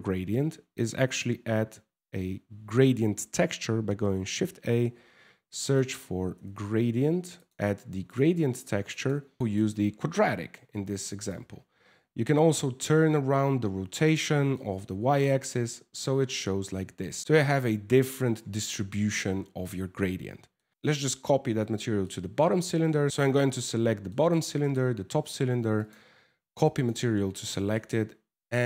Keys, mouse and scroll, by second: 0.8 shift+a, 1.5 w, 8.5 click, 10.9 click, 14.1 middle click, 20.2 shift+middle click, 20.7 shift+right click, 21.6 shift+middle click, 23.0 right click, 23.7 shift+middle click, 24.2 shift+right click, 25.4 click, 27.1 shift+middle click, 27.5 middle click.